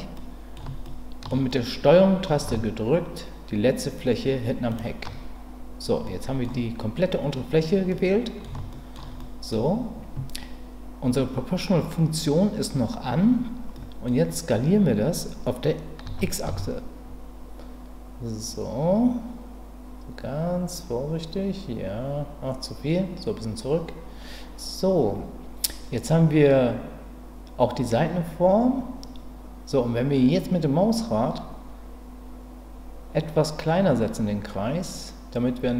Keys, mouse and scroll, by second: 0.1 middle click, 0.8 shift+middle click, 1.5 middle click, 4.7 ctrl+click, 6.0 middle click, 7.9 middle click, 8.7 shift+middle click, 9.2 middle click, 13.7 middle click, 16.0 s, 16.4 x.